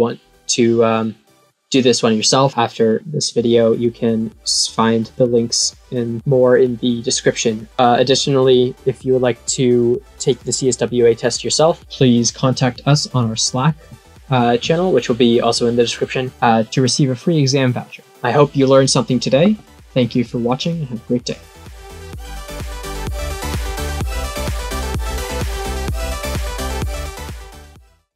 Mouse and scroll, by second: 2.9 middle click, 3.5-7.6 middle drag.